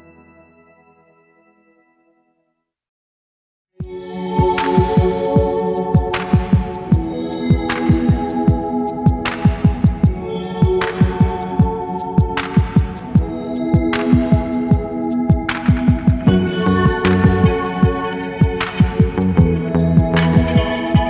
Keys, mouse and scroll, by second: 0.1 alt+click, 1.0 shift+right click, 1.8 scroll down 4, 2.1 alt+click, 2.8 shift+right click, 3.5 middle click, 3.5 scroll down 3, 3.7 alt+click, 5.1 alt+click, 5.7 alt+click, 6.3 scroll down 2, 6.9-10.1 drag, 11.0-11.8 alt+drag, 12.5-14.1 alt+drag, 14.6-20.6 alt+drag.